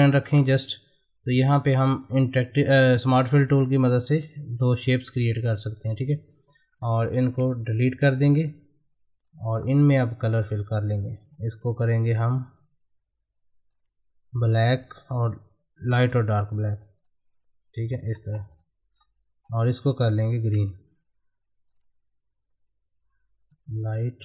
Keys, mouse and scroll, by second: 0.1 middle click, 0.4-4.1 drag, 6.9 Left, 7.9 click, 9.5-9.9 scroll up 1, 9.9 click, 10.4 middle click, 11.2 g, 12.6-16.0 ctrl+drag, 18.2 space, 18.5 click, 18.9-19.4 scroll up 1, 20.7-23.4 ctrl+drag.